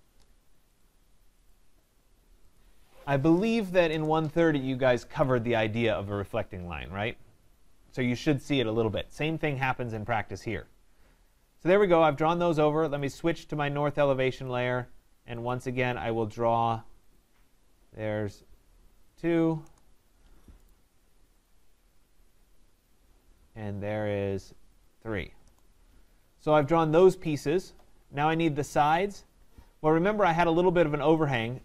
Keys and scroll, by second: 19.6 Return, 25.4 Return.